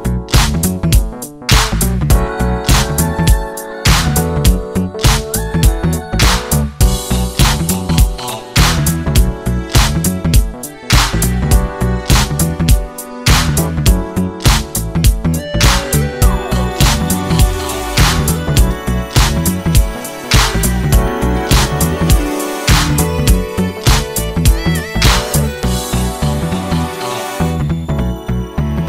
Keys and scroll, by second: 18.3 Escape.